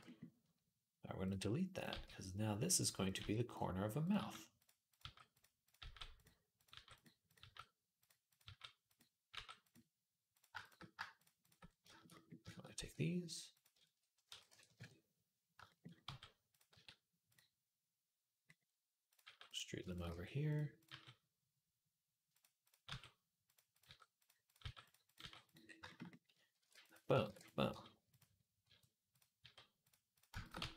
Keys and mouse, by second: 1.5 click, 1.7 g, 2.8 click, 3.0-7.2 typing, 3.8 click, 3.9 middle click, 4.7 click, 4.8-6.3 middle drag, 6.3 click, 6.4-10.1 middle drag, 8.2 g, 9.1 g, 10.1 click, 10.2 shift+middle click, 11.0 shift+click, 11.1 shift+middle click, 11.2 shift+click, 11.3-19.7 shift+middle drag, 12.6 e, 14.1 s, 15.9 g, 16.5 s, 19.0 g, 19.7 click, 19.8-22.4 middle drag, 19.8 g, 19.9 g, 20.7 g, 22.4 click, 22.5-24.8 middle drag, 22.6 g, 23.6 g, 24.4 g, 24.8 click, 24.9-30.2 middle drag, 25.0 g, 26.4 ctrl+r, 27.0 ctrl+r, 27.5 g, 28.4 r, 29.2 g, 30.3 middle click, 30.4 g.